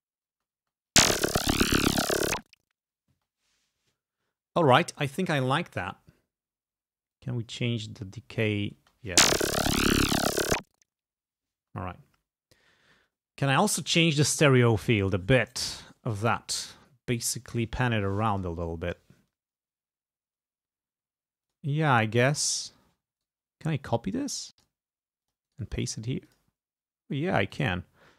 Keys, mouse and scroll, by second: 0.5 space, 3.2 space, 7.2-8.8 drag, 8.9 space, 11.7 space, 21.6 click, 23.3 right click, 24.6 click, 25.3 click, 25.5 right click, 26.3 click, 27.5 click.